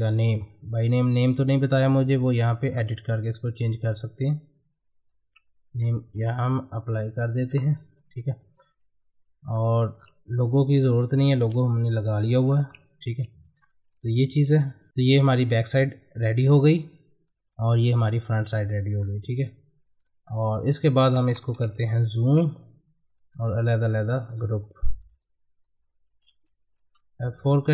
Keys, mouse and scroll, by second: 2.7 scroll up 1, 3.2 middle click, 4.5 click, 4.5-6.1 drag, 6.1 Down, 7.3 Up, 7.7 scroll down 1, 8.1 click, 8.4-9.6 middle drag, 9.6 click, 10.0-11.0 scroll down 1, 11.0-12.3 drag, 12.3 middle click, 12.7-14.3 drag, 14.3 shift+F2, 16.9 middle click, 19.0-20.3 scroll down 1, 20.3-22.1 drag, 22.1 shift+F2, 23.1 click, 24.4 ctrl+g, 24.8 middle click, 25.2 click, 26.1 ctrl+g, 27.4 click.